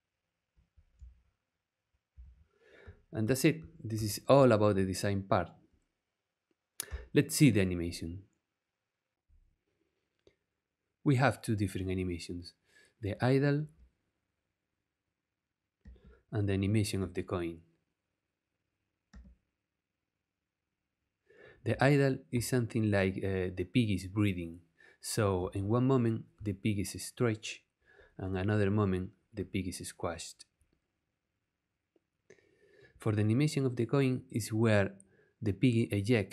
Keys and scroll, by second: 6.9 BackSpace, 13.7 space, 15.8 space, 16.9 space, 19.1 space, 21.7 space, 25.4 space.